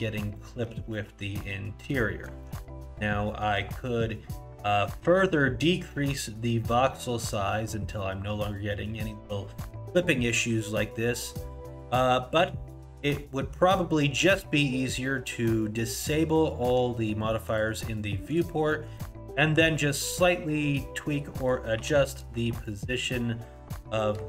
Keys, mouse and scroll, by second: 0.3 middle click, 0.8 scroll up 4, 1.0 middle click, 1.4 middle click, 2.4 shift+middle click, 2.8 scroll up 2, 9.7-12.7 scroll up 1, 17.5 click, 18.3 click, 18.9 middle click, 19.2 Tab, 20.3 scroll up 1, 21.4 click, 21.8 4, 22.6 shift+click.